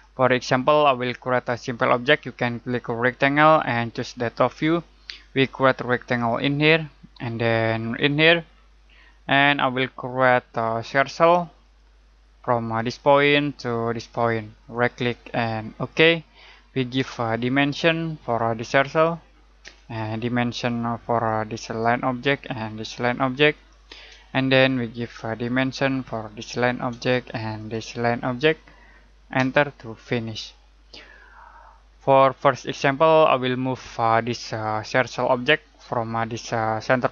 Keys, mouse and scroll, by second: 3.0 click, 14.7 right click, 15.7 click, 16.9 d, 18.2 click, 19.6 Return, 21.1 click, 22.1 Return, 22.8 click, 24.1 Return, 25.3 click, 27.5 click, 29.3 Return.